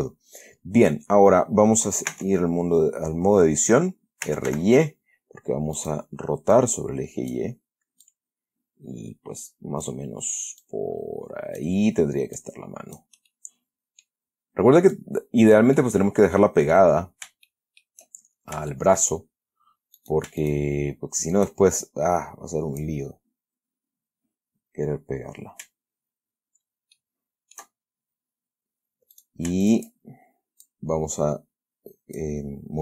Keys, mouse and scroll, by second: 2.4 Tab, 4.3-5.3 typing, 6.1 click, 6.9 click, 8.4-10.4 drag, 10.9-12.1 drag, 12.7 click, 13.6 middle click, 15.2 click, 16.1-17.2 middle drag, 17.4-17.7 scroll down 3, 17.8 shift+middle click, 18.6 shift+scroll up 2, 19.0 shift+middle click, 20.3 shift+right click, 20.7 shift+right click, 22.2-23.3 shift+drag, 27.3 shift+middle click, 28.1-29.2 shift+scroll up 1, 29.2 scroll up 1, 29.5 right click, 30.0 shift+right click, 30.2-30.8 shift+scroll up 1, 31.0-32.7 drag.